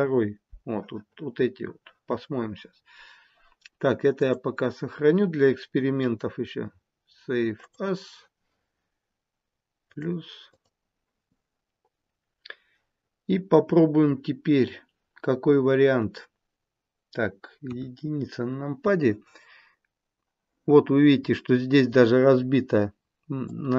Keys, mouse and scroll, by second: 4.2 click, 17.5 KP_1, 23.4 click.